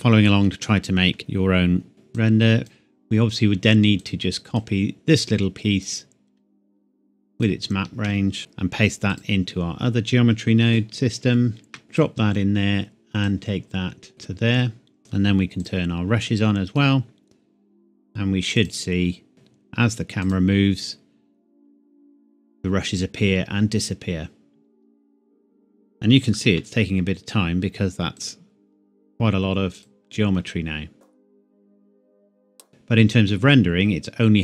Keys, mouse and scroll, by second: 2.1 click, 3.0 scroll down 1, 4.0 click, 6.9 shift+click, 8.4 ctrl+c, 9.1 click, 11.2 ctrl+v, 11.8 click, 13.6 click, 15.6 click, 17.3-18.6 scroll down 1, 18.6 click, 25.3 click, 26.5 KP_0, 28.2 click, 32.3 click, 32.6 middle click, 33.3 scroll down 1.